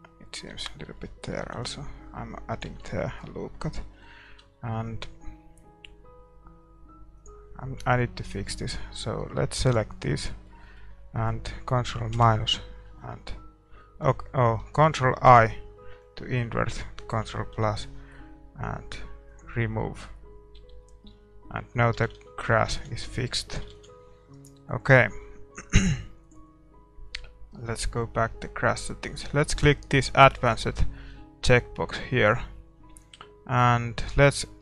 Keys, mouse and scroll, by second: 0.5 Tab, 1.2 ctrl+r, 2.7 Tab, 2.9-8.3 middle drag, 4.3 Tab, 8.3-12.1 drag, 8.3 a, 10.3-15.3 middle drag, 12.1 ctrl+KP_Subtract, 15.3 ctrl+i, 17.2 ctrl+KP_Add, 19.4-21.0 drag, 20.1 a, 20.1 middle click, 20.6 Tab, 20.8-30.4 middle drag, 21.9 a, 22.1 a, 22.4 a, 23.0 ctrl+s, 24.3 ctrl+s, 24.3-30.4 right drag, 30.4-34.6 drag.